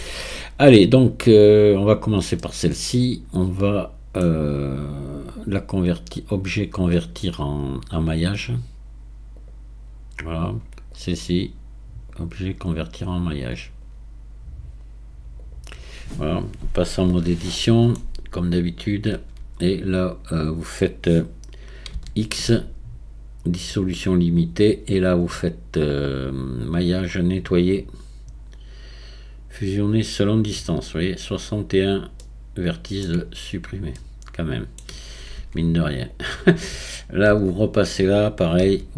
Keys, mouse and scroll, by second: 5.4-6.4 scroll up 1, 6.4-10.6 drag, 10.9 click, 12.1-15.3 drag, 16.4 scroll up 2, 17.1 Tab, 17.6-19.1 middle drag, 19.1 a, 21.9 x, 26.7-29.9 drag, 32.2-33.4 middle drag, 33.4-34.0 scroll up 1, 34.0-35.0 middle drag, 35.0-35.4 scroll down 1, 35.4 Tab, 36.1 click, 37.3 Tab, 38.6 a.